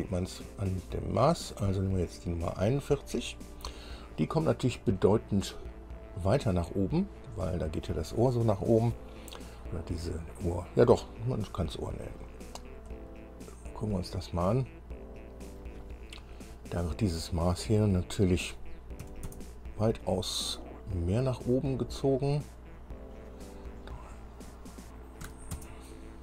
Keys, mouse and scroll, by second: 1.9 click, 4.8-5.1 scroll up 2, 6.7 scroll up 2, 12.7 scroll up 2, 13.1-15.9 middle drag, 17.9 click, 19.2 KP_3, 19.5 KP_Enter, 22.8 click, 25.4 KP_4, 25.7 KP_Enter.